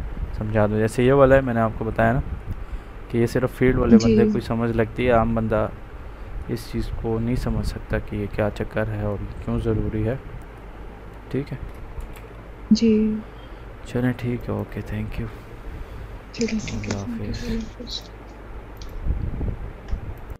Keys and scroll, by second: 12.1 ctrl+c.